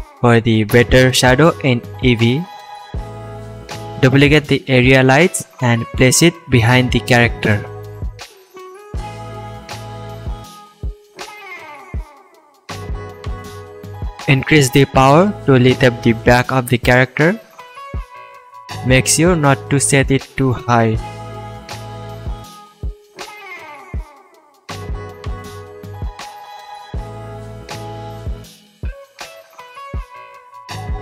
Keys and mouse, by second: 1.9 shift+d, 3.2-6.7 drag, 4.7 r, 6.7-8.5 middle drag, 8.2 r, 8.5-9.4 drag, 10.0 s, 10.2 middle drag, 10.8 r, 11.0 middle click, 17.5 KP_0, 24.5 h, 25.2 ctrl+z.